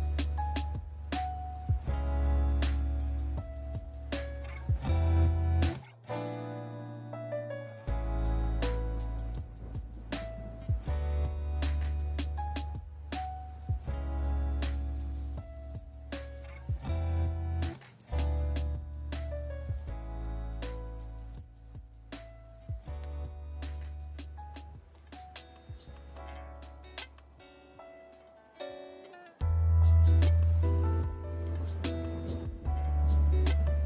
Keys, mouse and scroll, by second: 0.1 alt+right click, 0.3 middle click, 0.6 middle click, 0.9 middle click, 1.1 alt+right click, 1.5 click, 1.6 click, 1.6 click, 1.9 click, 1.9 right click, 2.0 alt+middle click, 2.3 middle click, 2.3 alt+middle click, 2.8 middle click, 3.1 shift+middle click, 3.5 middle click, 3.6 shift+middle click, 3.7 shift+middle click, 4.0 alt+right click, 4.2 click, 4.3 click, 4.4 click, 4.4 click, 4.5 click, 4.6 click, 4.8 right click, 5.0 click, 5.1 click, 5.3 alt+right click, 5.5 middle click, 6.1 alt+middle click, 6.2 middle click, 6.3 alt+middle click, 6.6 middle click, 6.8 middle click, 7.1 shift+middle click, 7.1 shift+middle click, 7.2 alt+right click, 7.3 alt+right click, 7.5 ctrl+right click, 7.6 shift+right click, 7.7 alt+right click, 8.0 middle click, 8.2 scroll, 8.5 click, 8.6 click, 8.9 click, 9.3 alt+right click, 9.6 middle click, 9.9 alt+right click, 10.0 click, 10.1 click, 10.2 click, 10.3-10.7 click, 10.4 click, 10.5 click, 10.6 click, 10.9 alt+right click, 11.1 middle click, 11.3 alt+right click, 11.4 click, 11.5 click, 11.8 alt+right click, 12.3 middle click, 12.6 alt+right click, 12.7 click, 12.8 click, 12.9 alt+right click, 13.2 middle click, 13.4 middle click, 13.6 middle click, 13.8 middle click, 13.9 middle click, 14.4 middle click, 14.6-15.3 scroll, 15.9 scroll, 16.0 shift+middle click, 16.2 middle click, 16.3 middle click, 16.6 middle click, 16.7 alt+right click, 16.9 click, 17.0 click, 17.2 alt+click, 17.3 alt+right click, 17.5 middle click, 17.6 middle click, 17.8 middle click, 18.5 alt+middle click, 18.5 alt+middle click, 18.7 middle click, 18.8 alt+middle click, 18.9 middle click, 19.1 middle click, 19.4 middle click, 19.5 shift+middle click, 19.6 shift+middle click, 19.9 alt+middle click, 20.0 alt+middle click, 20.1 alt+middle click, 20.4 alt+middle click, 21.4 click, 22.6 click, 22.9 click, 23.1 click, 23.6 click, 24.8 click, 25.0 middle click, 25.3 alt+right click, 25.4 middle click, 25.5 middle click, 25.8 alt+middle click, 26.0 middle click, 26.2 middle click, 26.3 alt+middle click, 26.4 shift+middle click, 26.7 shift+middle click, 26.9 click, 27.2 click, 27.9 middle click, 28.3 alt+middle click, 28.5 middle click, 28.9 alt+middle click, 29.3 click, 29.4 click, 29.8 click, 30.0 click, 30.1 click, 30.2 click, 30.3 click, 30.3 click, 30.5 click, 30.7 click, 30.8 right click, 31.0 alt+right click, 31.5 middle click, 31.6 alt+middle click, 31.9 middle click, 32.0 shift+middle click, 32.2 middle click, 32.7 middle click, 32.8 shift+middle click, 32.9 alt+right click, 33.1 click, 33.6 click, 33.7 alt+right click.